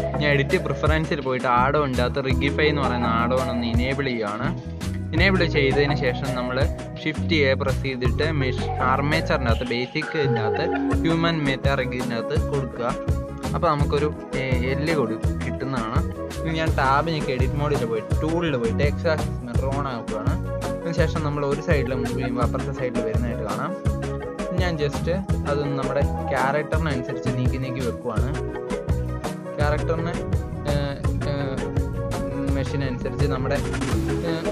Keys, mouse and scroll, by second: 7.5 shift+a, 9.6-10.3 shift+middle drag, 10.3 s, 12.5 click, 12.9-13.3 shift+middle drag, 13.3 scroll up 1, 13.4-14.3 shift+middle drag, 14.3 Tab, 15.1 n, 16.1 click, 17.2 click, 17.5 n, 18.2 click, 20.5 g, 21.5 r, 22.7 g, 23.6 g, 25.0 click, 25.2 g, 26.1 click, 26.4 g, 27.4 click, 27.6 g, 28.7 click, 28.9 g, 29.9 click, 30.1 g, 30.8 click, 31.3 click, 31.5 g, 33.0 shift+middle click, 33.7 KP_3, 34.4 shift+middle click.